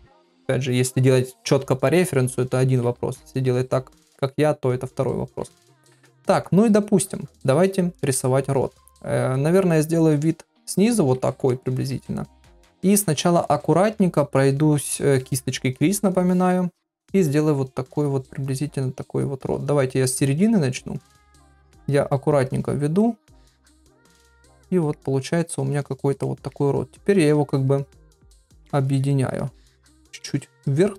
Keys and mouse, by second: 1.8 [, 3.0 ctrl+middle click, 5.3 KP_1, 8.1 middle click, 11.5 shift+middle click, 20.7 click, 21.4 click, 21.9 click, 22.5 click, 23.0 click, 23.5 click, 24.0 click, 24.4 middle click, 25.4 click, 25.8 click, 26.2 middle click, 27.1 click, 27.5 click, 27.8 click, 28.1 middle click, 28.9 click, 29.3 click, 30.3 click, 30.7 click.